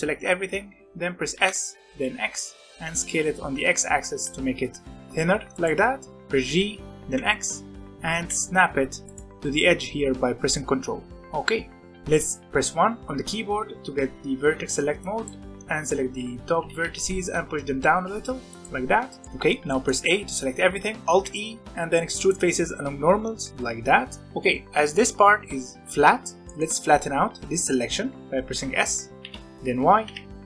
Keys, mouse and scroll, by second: 1.3 s, 6.4 g, 11.1-13.0 shift+middle drag, 13.0 1, 13.8 z, 14.3 alt+a, 14.7 b, 15.9 z, 16.6 g, 19.2 middle click, 19.9 a, 21.1 alt+e, 24.2-26.1 middle drag, 26.4-29.2 middle drag, 29.2 s.